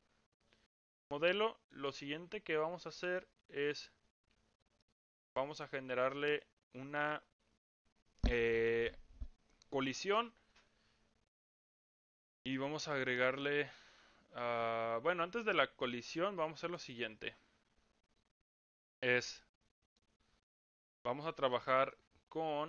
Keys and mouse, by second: 1.2-1.7 middle drag, 2.9 middle click, 4.8-5.2 middle drag, 6.4-6.8 middle drag, 7.0 click, 19.4-20.0 middle drag.